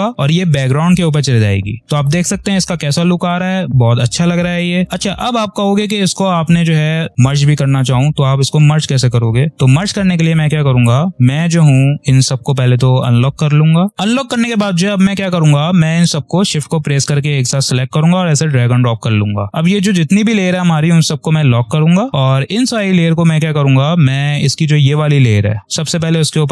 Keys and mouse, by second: 4.6 ctrl+-, 9.5 ctrl+=, 10.4 click, 10.6 space, 11.3 p, 12.6 click, 17.6-22.1 drag, 24.7 click.